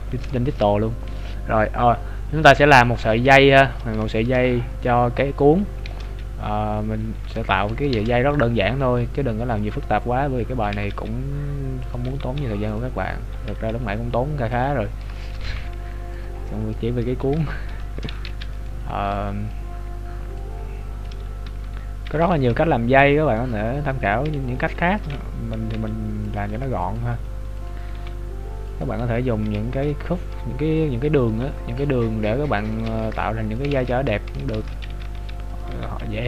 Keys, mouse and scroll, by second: 0.6 shift+middle click, 0.9 scroll up 2, 3.7 scroll up 5, 4.1 shift+middle click, 5.9 shift+a, 7.4 shift+middle click, 7.9 shift+a, 10.1-10.6 scroll down 5, 10.8 s, 13.0 scroll up 3, 13.5 s, 14.9-15.3 scroll down 3, 15.3 shift+middle click, 15.4 g, 16.3 scroll up 3, 17.4 Tab, 17.4 scroll up 7, 17.8 shift+middle click, 18.2 z, 18.6 right click, 19.0 b, 20.5 click, 21.6 Tab, 22.3 g, 23.7 scroll up 2, 25.7 s, 27.1 s, 28.0 g, 29.0 Tab, 29.4 right click, 30.5 scroll up 2, 31.3-32.0 scroll up 3, 31.3 g, 32.9 r, 33.8 ctrl+z, 35.1 e, 35.7 g.